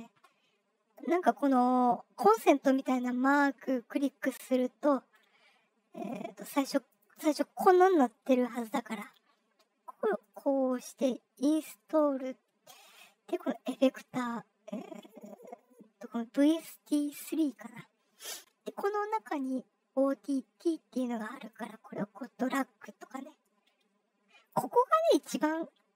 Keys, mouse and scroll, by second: 2.8 click, 3.8 click, 4.5 scroll down 2, 5.9 click, 6.4 click, 6.8 click, 8.5 click, 10.1 click, 11.8 click, 13.5 click, 17.2 click, 18.3 scroll down 1, 18.6-19.6 scroll, 21.4-24.4 drag.